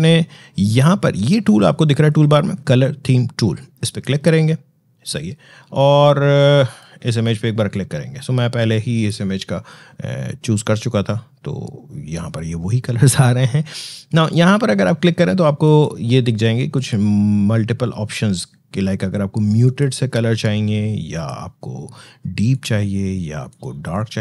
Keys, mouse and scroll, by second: 4.4 click.